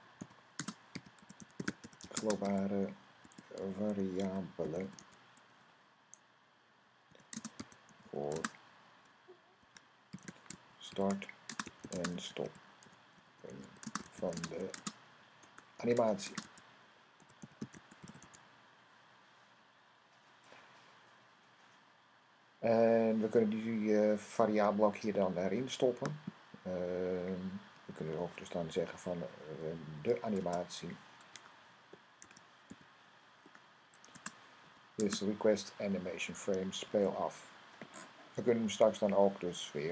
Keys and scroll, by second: 0.0-5.4 typing, 7.2-18.6 typing, 29.5-30.3 typing, 32.0-32.5 typing, 34.5 =, 36.7 super+s.